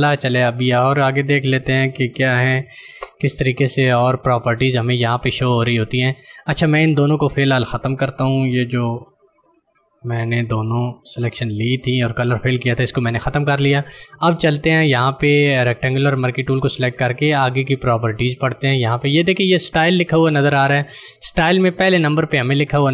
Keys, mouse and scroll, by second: 0.5 click, 5.6 click, 8.8 ctrl+alt+z, 14.4 ctrl+click.